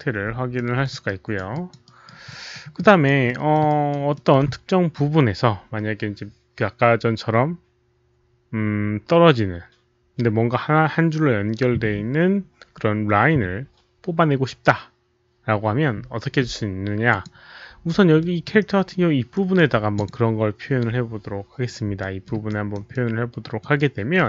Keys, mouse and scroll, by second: 0.5 alt+middle click, 1.0 alt+right click, 1.1 alt+6, 1.4 alt+6, 1.4 alt+click, 1.4 alt+middle click, 1.8 alt+right click, 2.2 alt+middle click, 2.7 alt+drag, 3.2 alt+middle click, 3.6 alt+right click, 4.1 alt+middle click, 6.1 alt+click, 7.5 alt+middle click, 7.5 alt+right click, 7.5 alt+click, 9.7 alt+middle click, 11.4 alt+middle click, 11.4 alt+right click, 11.4 alt+click, 12.3 alt+middle click, 12.3 alt+right click, 12.3 alt+click, 17.0 click, 18.1 alt+middle drag, 18.5 alt+right click, 19.3 alt+right click, 19.9 click, 21.9 alt+middle drag, 22.4 alt+right click, 22.8 alt+middle click, 22.8 click, 23.7-24.1 alt+right drag.